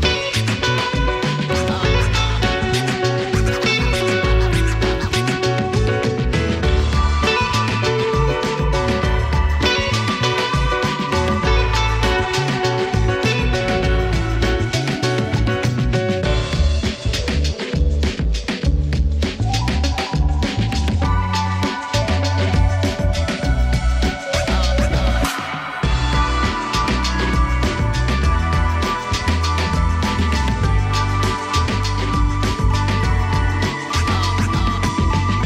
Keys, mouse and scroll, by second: 3.5 t, 4.4 click, 4.8-5.6 typing, 6.7 space, 9.6 click, 10.6 space, 15.7-18.2 drag, 18.2 ctrl+s, 18.8 right click, 19.5 click, 21.4 Return, 21.7-22.8 typing, 24.7 Return, 24.8-27.6 typing, 29.3 click, 31.3 space, 34.3 space.